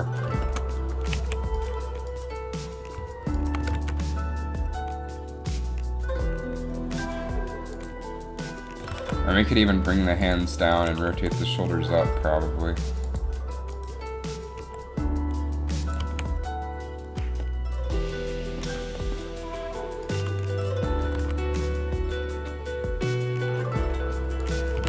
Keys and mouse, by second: 1.3 a, 1.8 click, 3.8 g, 9.0 g, 11.3 r, 13.9 click, 14.8 r, 16.3 a, 21.1 r, 21.2 r.